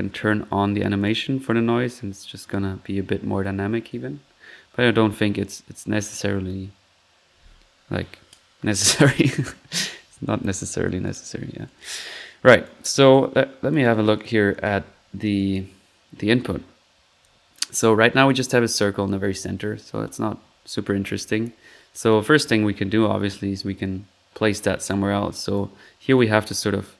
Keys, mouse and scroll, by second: 1.1 1, 8.9 click, 10.5 click, 11.0 click, 11.6 click, 12.6 drag, 12.8 right drag, 13.1 click, 14.1 drag, 14.5 click, 14.6 click, 15.3-15.7 drag, 17.2-17.7 drag, 17.8-18.7 drag, 19.2 1, 23.3 click, 26.1 click.